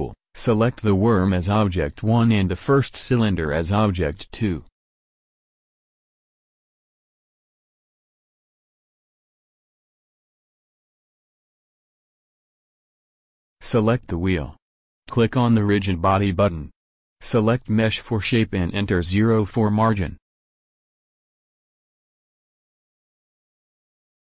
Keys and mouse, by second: 7.2-9.0 drag.